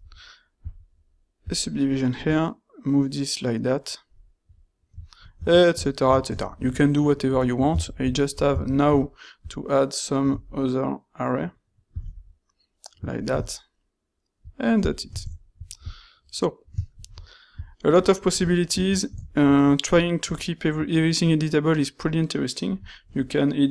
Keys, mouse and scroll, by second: 0.7 click, 7.8 ctrl+shift+q.